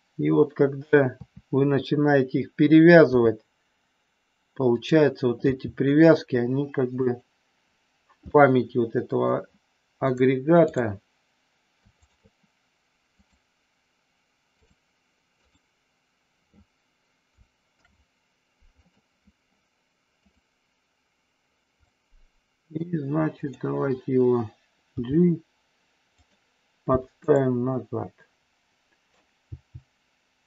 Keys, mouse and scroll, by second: 1.2 KP_3, 3.0 r, 4.8 click, 5.3 g, 7.0 click, 8.3-9.3 middle drag, 10.3 click, 12.0 shift+click, 13.3-14.8 drag, 15.4 click, 17.6 ctrl+p, 20.3-21.5 drag, 21.8-22.8 middle drag, 23.3 click, 24.9 g, 26.2 click, 27.2 click, 27.6 scroll up 1, 27.9-29.2 middle drag, 29.4 g.